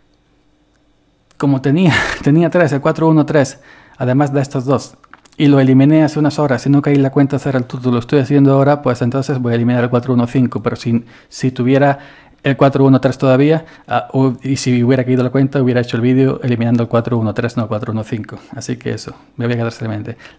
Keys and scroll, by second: 19.0 s.